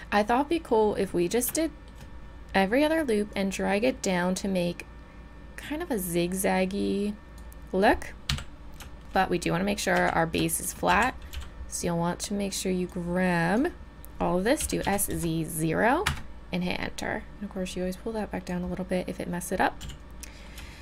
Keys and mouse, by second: 0.0-3.3 middle drag, 3.3-7.3 drag, 8.3 KP_3, 9.9 a, 10.9 z, 11.3 b, 12.2-13.4 drag, 14.6 s, 17.7 click, 19.8 z.